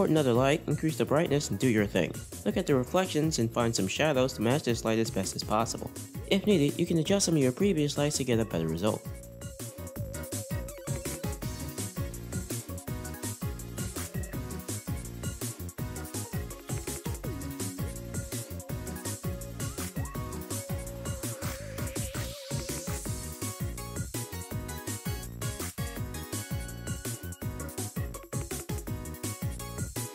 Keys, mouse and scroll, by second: 0.0 shift+a, 0.6 r, 1.0-2.3 drag, 2.3 shift+middle click, 2.3 scroll down 5, 2.4 r, 4.9 r, 10.2-11.5 shift+middle drag, 10.2 scroll down 2, 10.2 r, 10.7 scroll up 1, 11.5 scroll up 1, 12.4 click, 12.8-16.1 drag, 18.0-19.2 drag, 21.6-24.2 drag, 26.5 middle click, 27.4-28.6 drag, 29.0-30.1 drag.